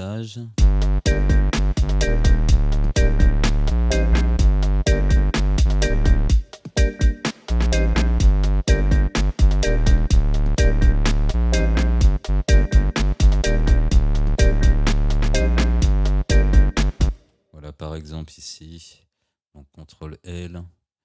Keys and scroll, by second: 0.6 space, 17.1 space, 19.4 ctrl+l.